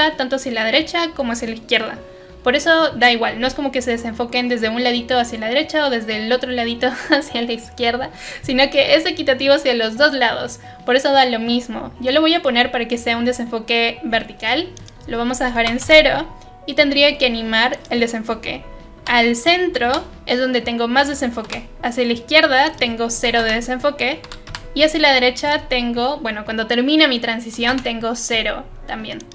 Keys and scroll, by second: 15.5 typing, 15.8 Return, 19.0 u, 19.8 u, 21.4 j, 23.2 0, 23.3 Return, 24.2 k, 24.4 k, 27.5 0, 27.6 Return.